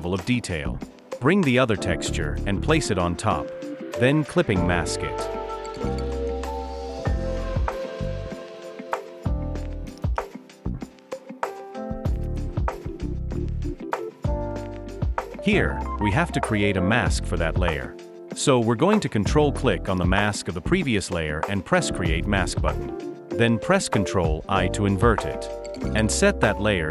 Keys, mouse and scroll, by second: 8.5 alt+shift+click, 15.3 alt+click, 18.7 ctrl+click, 25.3 ctrl+i.